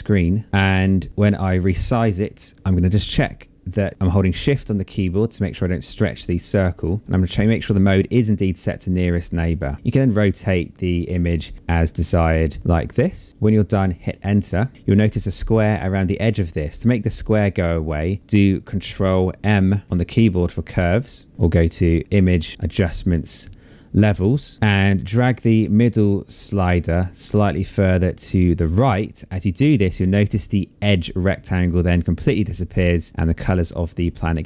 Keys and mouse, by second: 1.1 click, 2.5 click, 3.4 shift+click, 9.1 click, 11.6 click, 13.3 Return, 19.5 ctrl+m, 21.3 click, 22.2 click, 24.5 click, 25.3 click, 26.7 click, 31.5 click.